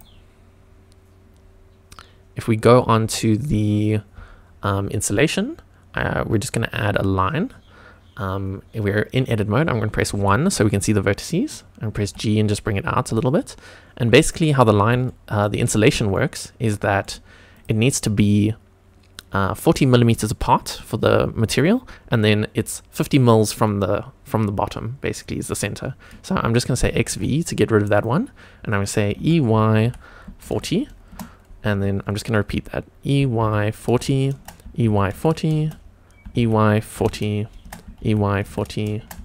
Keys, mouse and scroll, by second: 6.9 click, 11.9 1, 11.9 g, 14.2 click, 14.6-15.0 scroll up 2, 15.0 shift+middle click, 16.1 shift+middle click, 17.0 shift+click, 26.8 x, 27.8 click, 29.1 e, 29.8 y, 30.4 KP_4, 30.5 KP_0, 31.0 Return, 33.1-35.1 typing, 34.3 Return, 35.6 shift+Return, 36.2-39.2 typing, 37.6 Return, 39.0 Return.